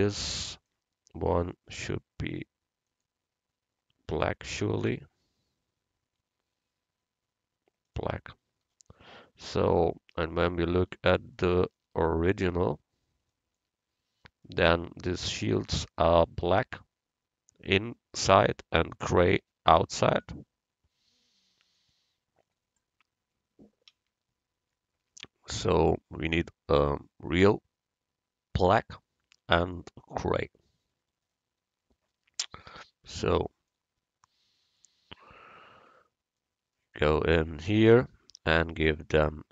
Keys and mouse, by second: 2.9-4.8 drag, 10.3 a, 37.7-39.5 right drag, 38.9-39.5 drag.